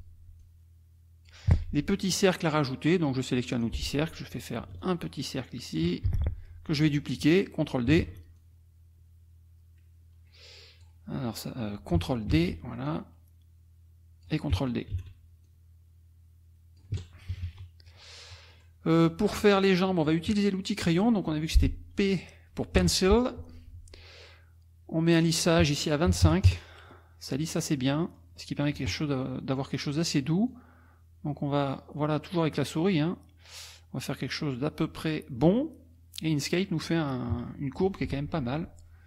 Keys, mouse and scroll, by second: 0.4 click, 1.5 F1, 3.5 click, 4.8-6.0 ctrl+shift+drag, 6.1 ctrl+shift+F1, 8.0 shift+d, 8.4-11.0 shift+drag, 12.3 ctrl+d, 12.9-14.4 ctrl+drag, 14.9 ctrl+d, 15.5-17.0 ctrl+drag, 17.2 KP_Subtract, 18.2 middle click, 18.3 scroll down 2, 18.5 scroll up 2, 18.6 scroll down 2, 18.9 middle click, 22.8 p, 25.3 click, 26.1 KP_2, 26.2 KP_5, 26.5 KP_Enter, 27.2 click, 28.0 click, 30.5-35.6 drag, 36.5 middle click, 38.3 F2.